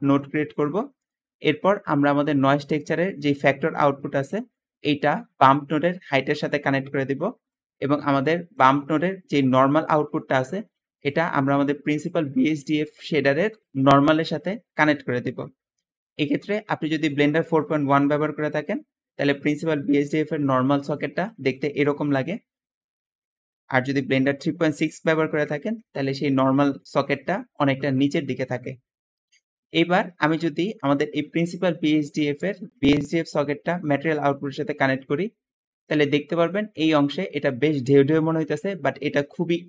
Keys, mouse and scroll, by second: 0.2 middle click, 0.6 middle click, 0.6 scroll up 2, 8.4 middle click, 10.6-11.2 middle drag, 10.6-11.2 scroll down 2, 13.8 middle click, 18.4 middle click, 18.4-18.7 scroll down 2, 18.7-19.1 scroll up 2, 19.4 `, 19.4 click, 20.1 click, 21.2 click, 22.8 Escape, 25.6 middle click, 26.0 scroll up 2, 26.2-26.8 scroll down 2, 26.8 `, 27.2 click, 27.6 click, 28.0 click, 28.8 Escape, 32.5-34.3 drag.